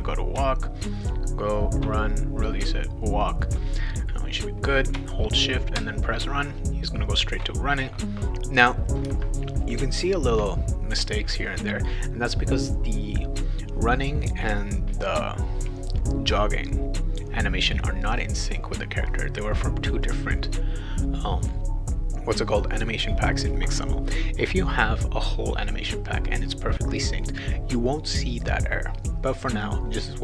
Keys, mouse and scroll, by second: 0.4 shift+w, 5.7 shift+w, 12.6 click, 20.0 click.